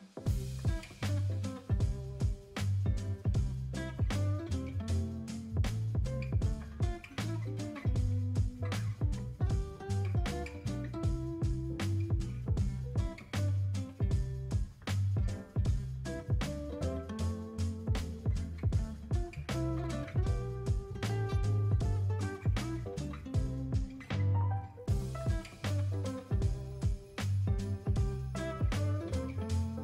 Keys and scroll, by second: 1.3 space, 2.1 space, 11.6 space, 14.1 space, 14.9 space, 17.8 space.